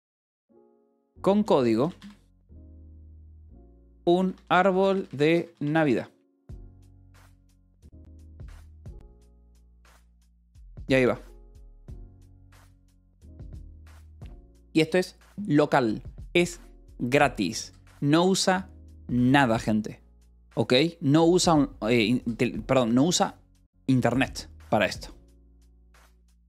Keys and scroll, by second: 0.0-2.2 typing, 3.4-6.0 typing.